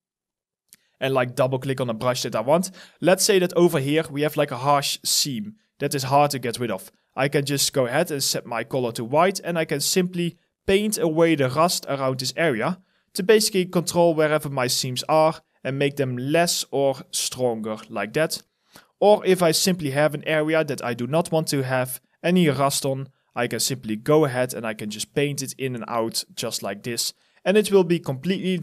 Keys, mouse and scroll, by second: 0.3 double click, 1.1-2.9 scroll up 1, 3.1 alt+middle click, 3.5 alt+right click, 4.3 alt+click, 5.5 x, 14.0 alt+click, 14.6 alt+middle click, 16.1 alt+click, 18.0 alt+right click, 18.3 alt+click, 19.1 alt+middle click, 19.4 alt+right click, 20.1 alt+click, 20.4 alt+middle click, 25.3 alt+click, 25.7 alt+middle click, 27.4 alt+right click, 27.8 alt+click, 28.3 alt+middle click.